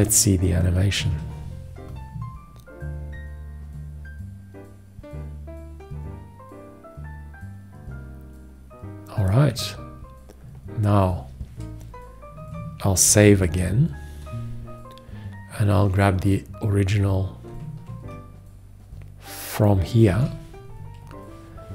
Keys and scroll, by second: 1.2 ctrl+Return, 13.3 ctrl+s, 20.4 ctrl+c.